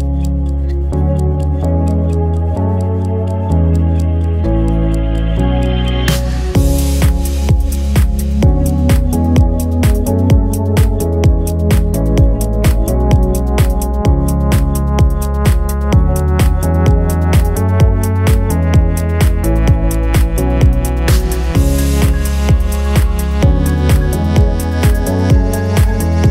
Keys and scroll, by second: 1.7-5.7 typing, 6.3 Escape, 8.2 g, 8.4 r, 9.6 Escape, 9.7 ctrl+z, 12.2 g, 13.4 x, 14.5 g, 14.7 x, 15.1 y, 16.0 g.